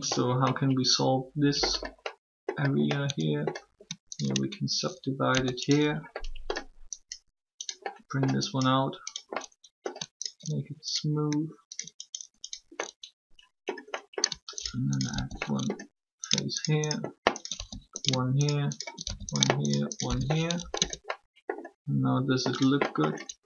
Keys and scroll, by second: 5.1 shift+w, 20.7 shift+Tab.